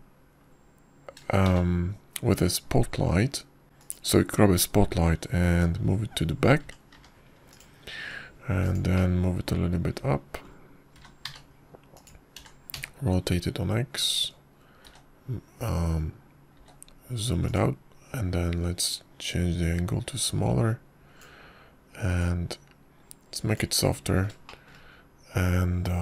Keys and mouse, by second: 3.3 shift+a, 7.4 g, 9.9 `, 10.8 click, 11.1-12.3 middle drag, 12.8 g, 14.2 r, 16.7 s, 18.4 s, 20.7-23.1 drag, 24.0-25.4 drag.